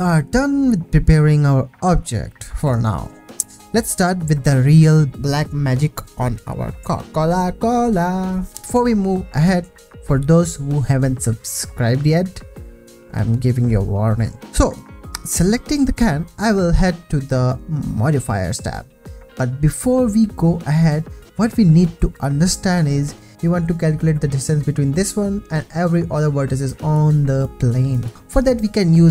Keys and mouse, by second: 15.3 click, 18.3 ctrl+s, 21.0 Tab, 22.4 1, 28.1-29.1 drag.